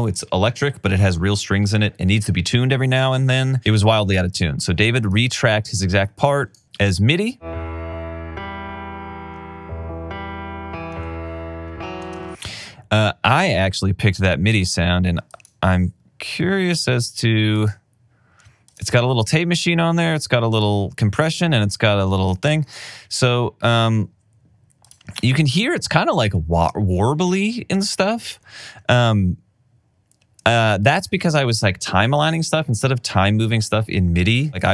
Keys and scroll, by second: 12.2 space.